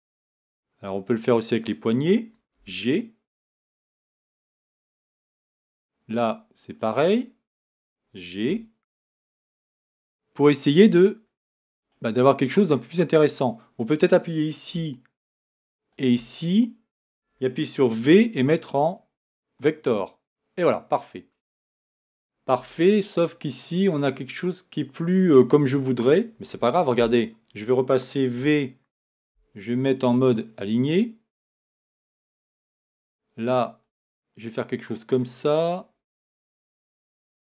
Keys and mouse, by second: 2.5 g, 8.5 g, 18.0 v, 28.4 v.